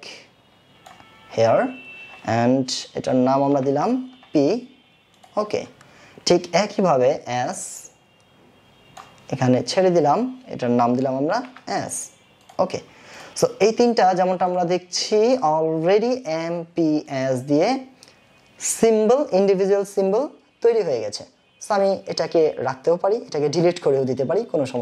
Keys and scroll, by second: 11.3 shift+s.